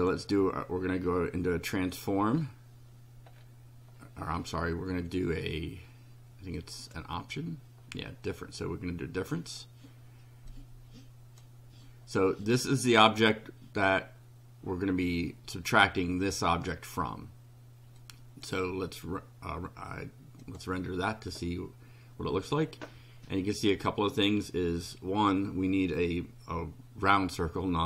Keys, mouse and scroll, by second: 2.4 scroll down 2, 3.3 scroll down 1, 6.6 click, 8.3-9.8 drag, 10.5-11.6 drag, 18.0 click, 20.4 click.